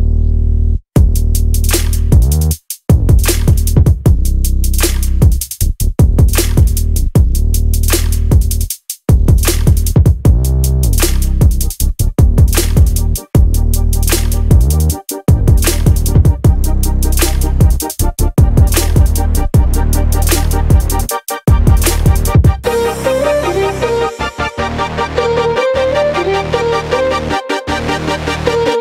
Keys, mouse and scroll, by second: 0.0 click, 1.9-4.5 scroll up 2, 4.5-5.5 scroll up 1, 5.5-7.5 scroll up 1, 7.5-8.2 scroll down 3, 8.9-13.3 drag, 13.3-14.0 scroll up 4, 16.9 click, 16.9 KP_0, 17.0 KP_0, 18.2-18.5 scroll down 1, 19.2-19.6 scroll up 1, 22.6 click.